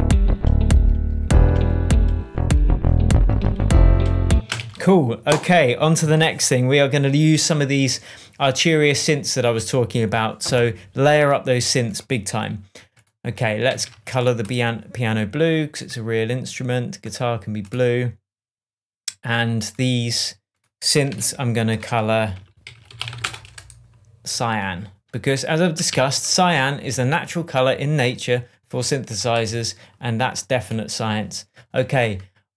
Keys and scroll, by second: 4.3 space, 4.6 super+s, 13.7 shift+super+t, 21.1 super+r, 22.4-23.6 typing, 25.9 super+s.